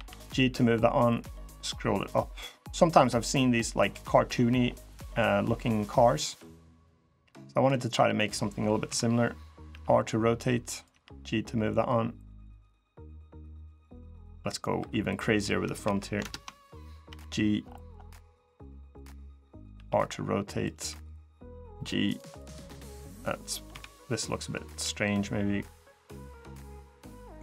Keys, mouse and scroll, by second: 6.9 middle click, 7.9 middle click, 8.6 KP_3, 9.4 r, 10.6 g, 12.4 middle click, 13.0 click, 14.0 middle click, 14.5 3, 14.8 click, 15.6 KP_3, 16.0 ctrl+KP_Add, 16.8 g, 19.5 r, 20.5 g, 22.1 middle click, 22.6 click, 23.4 KP_3, 24.5 g, 27.3 middle click.